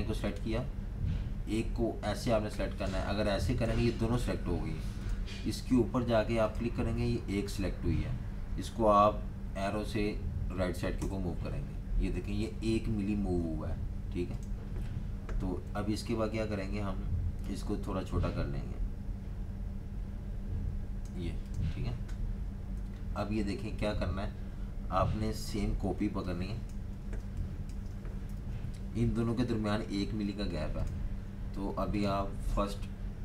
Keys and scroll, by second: 10.9 Tab, 15.7 a, 26.0-28.2 typing, 28.3 super+-.